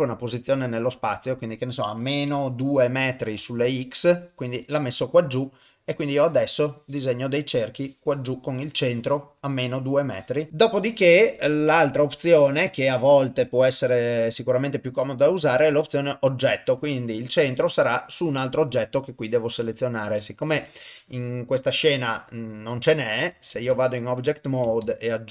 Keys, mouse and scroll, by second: 5.9-7.2 drag, 7.8-9.5 drag, 10.1 click, 11.5-19.1 drag, 20.6 KP_0, 21.0-23.2 middle drag, 23.5 ctrl+Tab, 24.8 shift+a.